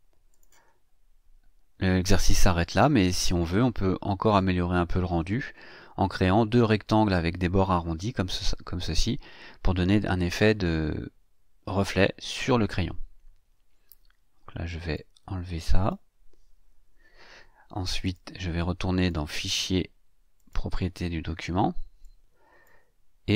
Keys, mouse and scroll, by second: 0.3 click, 14.1 ctrl+scroll down 2, 14.9-16.1 ctrl+drag, 16.9 Delete, 18.0 click, 18.9 click, 20.4 click, 22.0-22.8 drag.